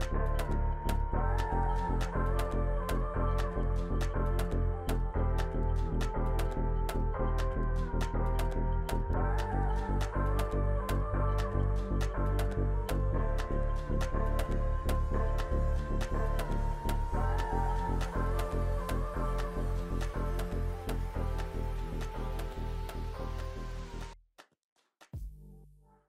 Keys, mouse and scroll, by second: 0.1 double click, 13.0 double click.